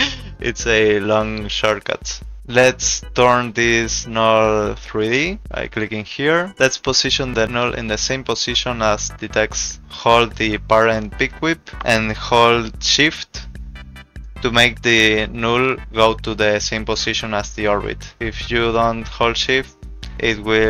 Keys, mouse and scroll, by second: 4.9 click, 7.9 click, 9.8 click, 12.6 shift+click, 18.1 ctrl+z, 19.8 click.